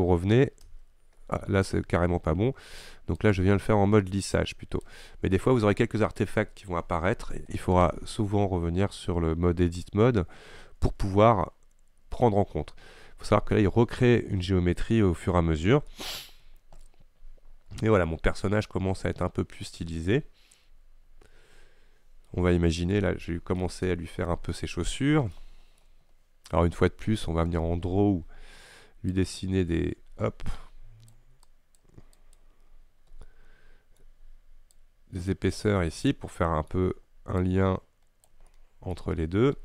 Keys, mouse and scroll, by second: 0.8 Tab, 1.7-5.6 shift+drag, 5.6-11.0 middle drag, 11.0 Tab, 15.9 scroll down 1, 16.0 middle click, 16.5-16.9 scroll down 3, 16.9-20.0 middle drag, 23.0-26.1 shift+middle drag, 26.1-27.7 scroll up 2, 29.2-32.9 drag, 32.9-33.3 scroll up 2, 33.3-34.8 middle drag, 34.8-36.4 drag, 36.4-37.5 middle drag, 37.5-38.6 drag, 38.6 middle click, 39.0-39.6 scroll up 1.